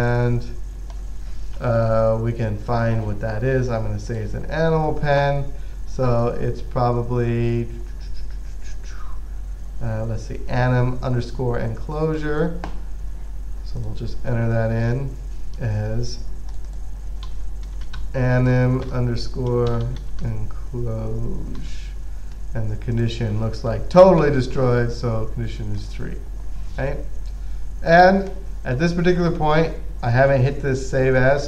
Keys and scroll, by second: 17.3-21.9 typing, 24.5 typing.